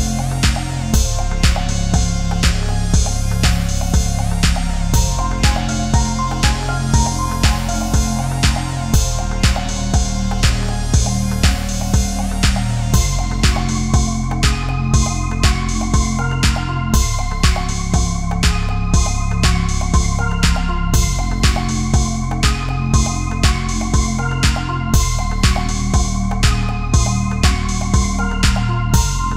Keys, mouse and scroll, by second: 0.0-1.1 typing, 4.0 2, 5.1-5.6 scroll down 1, 5.9-6.2 scroll up 1, 9.7 middle click, 10.5 scroll down 1, 14.9 right click, 16.7 click, 18.3-18.6 scroll down 1, 18.6 scroll up 1, 18.9 scroll down 1, 20.4 click, 20.8 scroll up 1, 21.8-22.3 scroll down 1, 23.4 click, 23.7-24.4 scroll up 1, 24.7-25.9 typing, 26.4 scroll up 1, 27.3 middle click, 28.2 scroll down 1, 29.0 r.